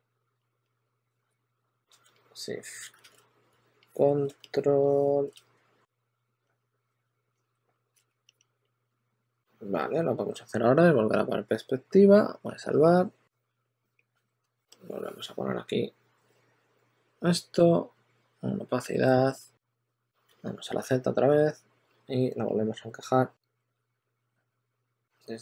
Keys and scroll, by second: 0.7 w, 1.2 w, 1.5 w, 2.9 super+z, 5.8-8.5 typing, 13.6 4, 14.3 z, 19.7-20.6 typing.